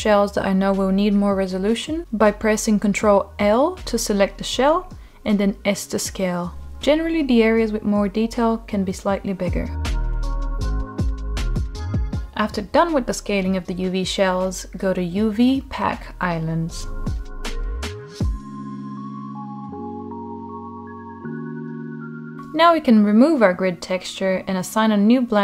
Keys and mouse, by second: 2.1 click, 2.6 ctrl+shift+l, 3.7 shift+click, 4.3 shift+middle click, 5.0 shift+click, 6.5 ctrl+l, 7.1 shift+click, 8.0 shift+click, 10.7 ctrl+l, 11.6-12.1 drag, 13.2 shift+middle click, 14.2 shift+middle click, 15.1-19.7 drag, 21.5 click, 22.1 alt+middle drag, 25.3-25.4 drag.